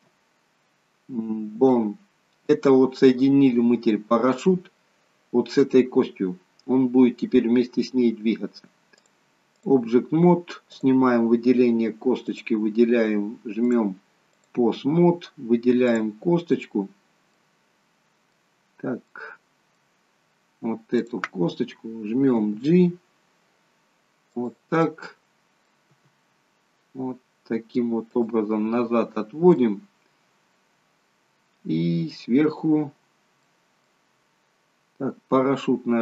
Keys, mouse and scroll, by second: 6.3 scroll down 2, 9.0 click, 11.0 click, 12.2 click, 13.7 click, 15.0 scroll up 2, 15.8 click, 16.4 scroll down 2, 17.4 middle click, 19.1 middle click, 21.1 click, 22.3 g, 24.9 middle click, 26.0 g, 28.6 scroll up 4, 29.1 scroll down 2, 29.5 middle click, 32.3-33.1 scroll down 4, 33.4 middle click, 35.7 scroll down 2.